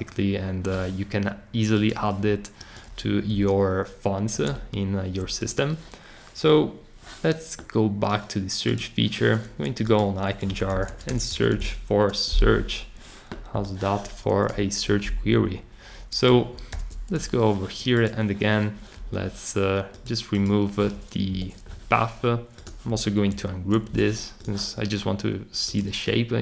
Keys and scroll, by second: 10.2-12.1 typing, 16.7 shift+super+g, 21.3 BackSpace, 23.3 shift+super+g.